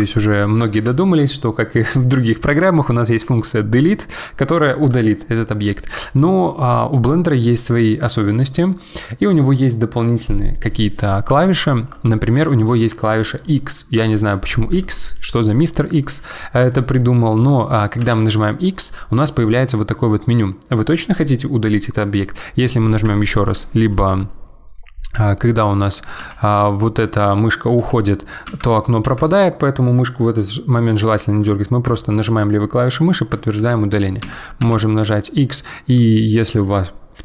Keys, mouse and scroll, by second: 0.7 ctrl+z, 11.5-12.5 shift+middle drag, 12.5 click, 27.8 x, 29.0 x, 33.6 ctrl+z, 34.2 x.